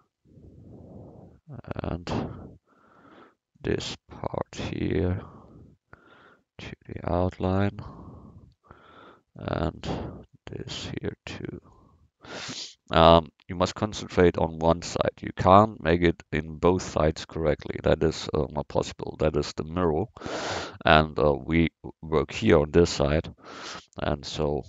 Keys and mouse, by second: 2.8 a, 3.1 c, 3.8-6.3 drag, 7.3 a, 7.6 c, 8.6 c, 17.9-21.1 middle drag.